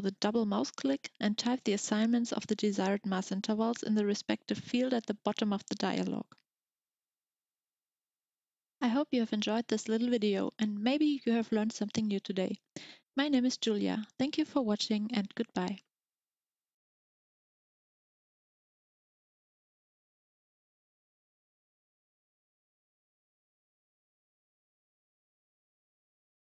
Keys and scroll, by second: 0.0-0.6 typing.